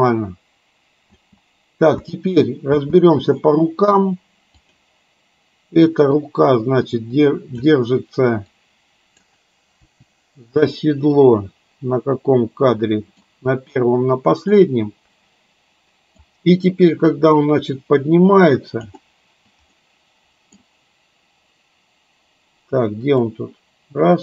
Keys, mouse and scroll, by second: 1.2 space, 1.9 space, 2.8 space, 4.7 click, 6.2-7.7 drag, 8.7-9.3 drag, 9.9 Delete, 10.7-13.3 middle drag, 14.7-16.3 middle drag, 17.2-18.9 drag, 19.9 middle click, 23.4-24.2 drag.